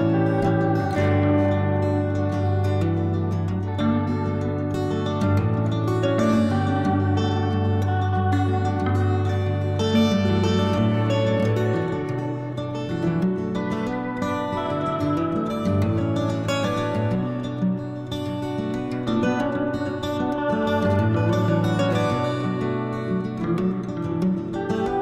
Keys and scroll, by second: 2.5 ctrl+z, 3.3 5, 8.2 s, 10.4 s, 17.1 s, 20.5 s, 24.7 s.